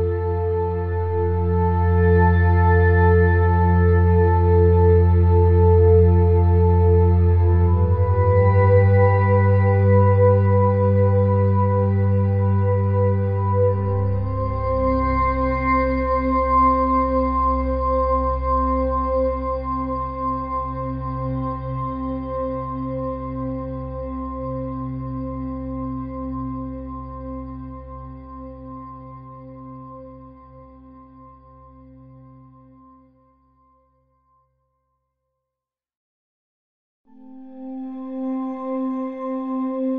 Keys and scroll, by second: 1.2 -, 9.7 ], 27.6 ], 27.7 [, 27.8 ], 36.2 [, 36.3 ].